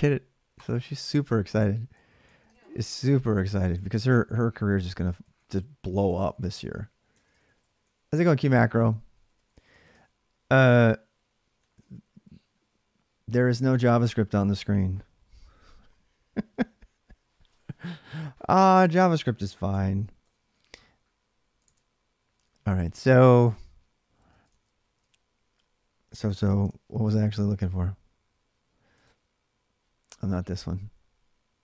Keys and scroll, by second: 2.1 ctrl+[, 2.2-6.0 typing, 6.9 ctrl+[, 7.1-7.6 typing, 7.3 Return, 8.7-9.4 typing, 11.2-12.3 typing, 17.2 alt+Tab, 19.5 BackSpace, 20.0 Return, 21.4 alt+Tab, 23.0 alt+Tab.